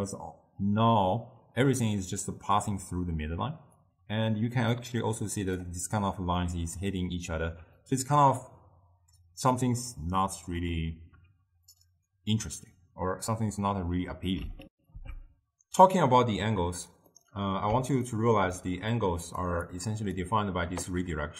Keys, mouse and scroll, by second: 3.9-7.0 drag, 14.7 ctrl+alt+shift+w, 17.2-19.3 middle drag, 19.3 click, 19.7-21.3 drag.